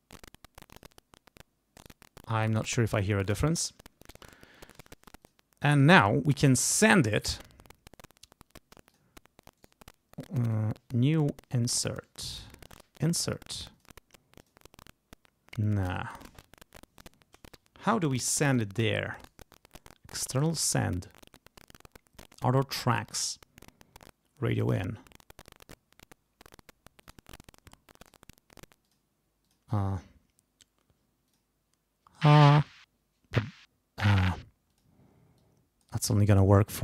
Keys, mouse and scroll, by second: 0.7 click, 1.8 right click, 2.8 click, 5.2 click, 8.9 click, 9.6 right click, 13.7 click, 14.4 click, 19.2 right click, 20.6 click, 23.1 click, 24.6 click, 27.0 click, 28.0 click, 28.8 click, 29.4 click, 31.3 click, 34.7 click, 35.4 click.